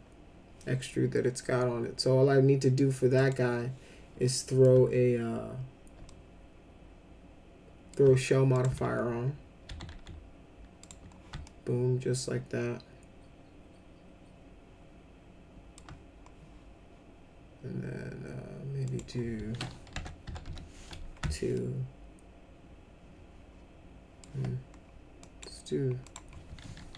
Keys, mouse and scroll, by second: 3.2 click, 4.2 alt+middle click, 6.1-7.9 alt+middle drag, 8.5 click, 9.6 s, 9.9 s, 10.8 click, 11.4-15.7 alt+middle drag, 18.8 click, 19.9 BackSpace, 20.2 2, 20.4 Return, 21.5-24.2 alt+middle drag, 25.2 click, 26.0 click.